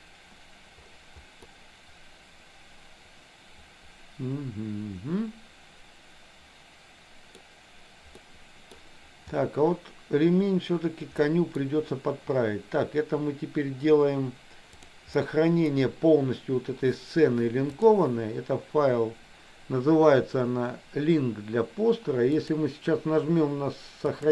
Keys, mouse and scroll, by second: 1.5-7.5 middle drag, 8.3 middle click, 11.2 middle click, 14.8 click, 15.2 middle click, 17.9-19.5 drag, 22.4-24.3 drag.